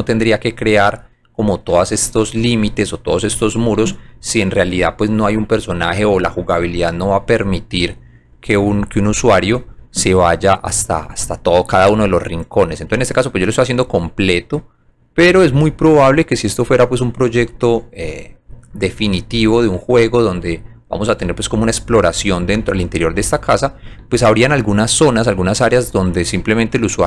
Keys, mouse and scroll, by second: 0.1 alt+middle click, 1.8 alt+middle click, 2.3 alt+middle click, 3.8 alt+middle click, 4.4 alt+middle click, 4.8 scroll up 1, 5.3 alt+click, 5.7 alt+middle click, 6.4 alt+middle click, 6.9 alt+click, 7.8 alt+middle click, 9.5 alt+click, 11.0 click, 12.6 click, 13.3 alt+middle click, 15.1 alt+click, 16.9 alt+middle click, 17.6 alt+click, 18.2 alt+middle click, 18.7 alt+middle click, 19.3 scroll up 1, 19.9 alt+click, 20.5 alt+middle click, 22.0 alt+click, 23.6 click, 24.0 alt+middle click, 25.8 alt+click.